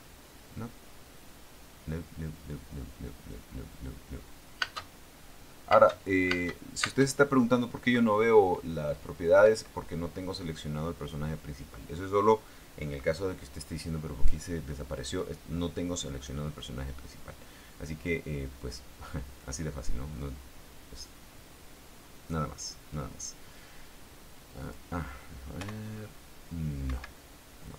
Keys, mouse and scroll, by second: 4.9 space, 5.9 space, 9.6 Escape, 20.4-22.6 drag, 24.8 click, 25.7 p, 27.0 Escape.